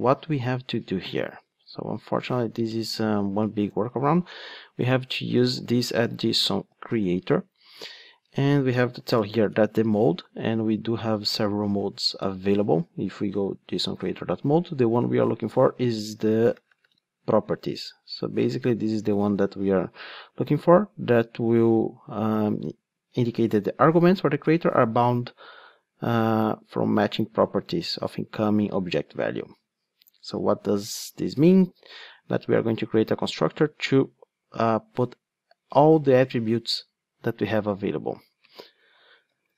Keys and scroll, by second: 1.4 ctrl+Tab, 2.9 Tab, 7.2 Return.